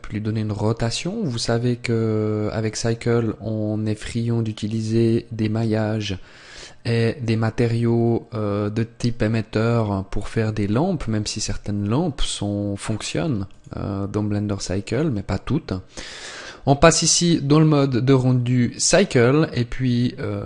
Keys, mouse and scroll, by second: 2.6 click, 13.3 click.